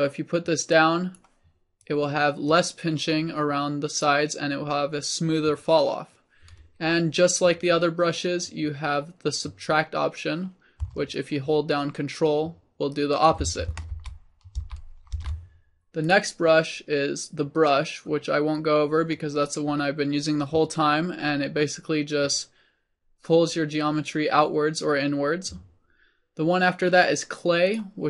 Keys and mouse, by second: 11.2-14.3 drag, 14.3 ctrl+z, 14.9 ctrl+z, 15.5 ctrl+z, 16.1-18.4 drag.